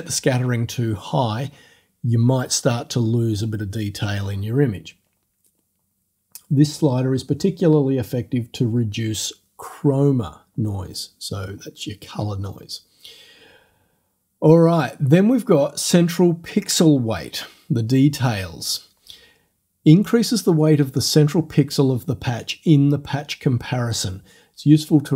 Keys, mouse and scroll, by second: 15.1-16.1 scroll down 4.